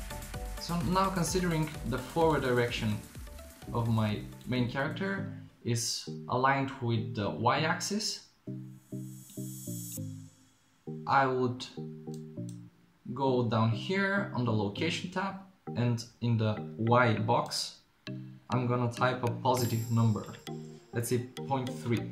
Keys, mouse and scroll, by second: 2.1 middle click, 6.6-9.3 right drag, 9.3-11.4 drag, 12.2 click, 17.5-22.1 drag.